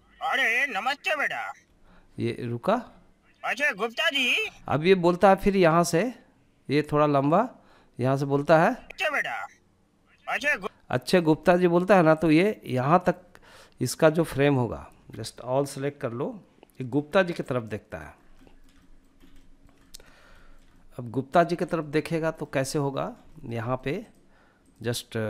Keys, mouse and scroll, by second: 0.8 space, 1.9 space, 4.7-7.3 drag, 7.7 space, 9.5 space, 10.3-12.2 drag, 16.1-17.1 middle drag, 17.2 scroll down 1, 17.5 shift+middle click, 17.9 middle click, 18.3 scroll up 2, 18.5 shift+middle drag, 18.9 middle click, 19.3 scroll down 1, 19.5 shift+middle click, 19.8-20.4 middle drag, 20.7 scroll up 1, 20.9 shift+middle click, 21.3 shift+middle drag, 21.7 middle click, 22.0-22.4 scroll up 2, 22.4 shift+middle click, 22.7 shift+middle click, 23.1 drag, 23.7 click.